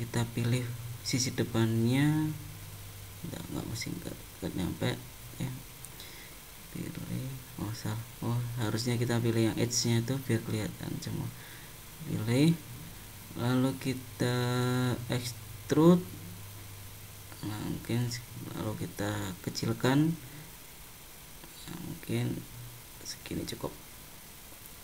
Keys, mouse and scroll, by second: 0.8 click, 3.2 middle click, 4.6 middle click, 6.2 click, 7.9 middle click, 9.2 click, 10.0 click, 11.1 middle click, 12.5 click, 14.4 middle click, 16.9 e.